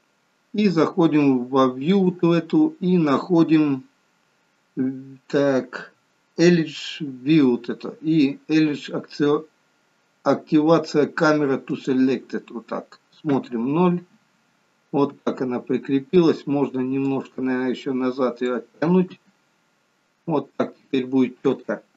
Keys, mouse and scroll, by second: 3.7 click, 13.4 KP_0, 15.2 KP_0, 17.2 click, 19.2 KP_0.